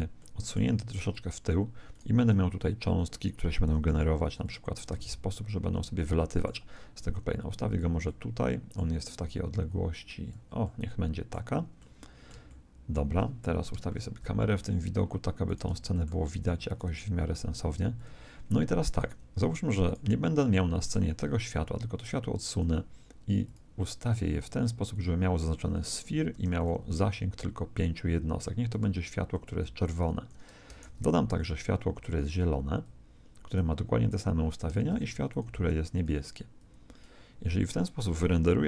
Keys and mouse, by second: 0.1 middle click, 1.1 click, 1.9 right click, 3.6 r, 4.9 alt+a, 5.6 Escape, 5.8 middle click, 6.9 g, 8.3 click, 9.6 click, 13.9 ctrl+shift+KP_0, 15.5 right click, 15.7 g, 16.8 g, 18.9-21.7 right drag, 23.4-27.3 drag, 28.7 click, 30.8 shift+d, 32.2 click, 34.7 shift+d, 35.9 click.